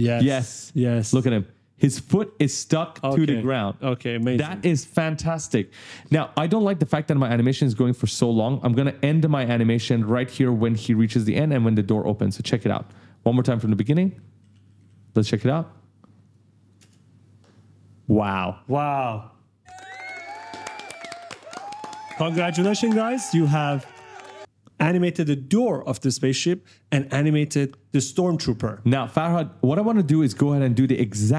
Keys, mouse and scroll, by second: 0.0-0.9 typing, 2.4-3.2 typing, 3.7 click, 4.6 ctrl+scroll down 1, 5.9 ctrl+scroll up 1, 6.5 right click, 8.8 click, 12.1 click, 12.7-14.9 typing, 12.9 right click, 15.1 right click, 16.1 click, 16.6 space, 25.7 right click, 28.9-31.2 typing, 29.4 right click.